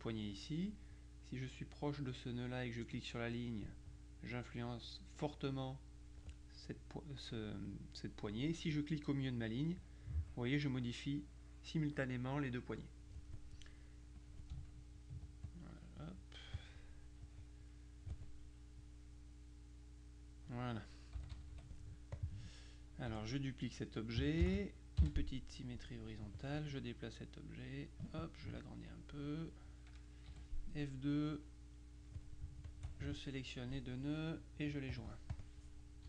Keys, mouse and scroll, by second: 3.0 click, 9.5-13.6 drag, 14.2 click, 15.1 ctrl+click, 17.3 click, 18.9-21.0 drag, 21.2 KP_Subtract, 22.2 click, 23.2 F1, 24.5 ctrl+d, 25.0 ctrl+h, 26.3-28.6 drag, 29.0 click, 30.4 F2, 31.4 click, 32.8 shift+click, 35.0 click.